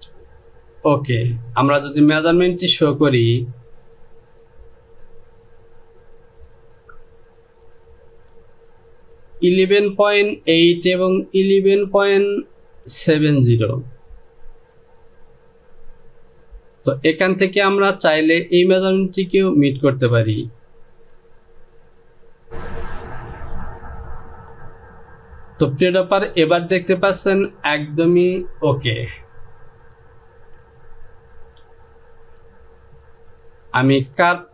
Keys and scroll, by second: 31.4 Home.